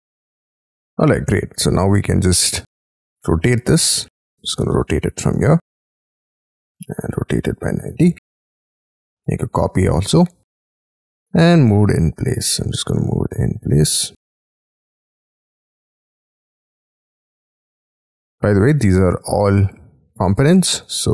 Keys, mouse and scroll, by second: 0.7 scroll down 1, 1.1 middle click, 2.0-3.7 scroll up 26, 2.8 space, 3.2 q, 3.9 scroll down 5, 5.3 Up, 6.2 ctrl+click, 8.2-9.3 typing, 9.1-10.3 scroll down 23, 10.8 m, 11.1-11.5 scroll up 11, 11.6 middle click, 12.3-12.9 scroll up 9, 14.0 shift+scroll down 6, 15.6 shift+click, 15.8 space, 16.1 scroll down 5, 16.6 double click, 16.9 double click, 17.1 double click, 17.3 double click, 17.6 double click, 17.7 double click, 17.9 double click, 18.1 double click, 18.2 double click, 18.4 double click, 18.6 double click, 20.4-20.9 scroll down 6.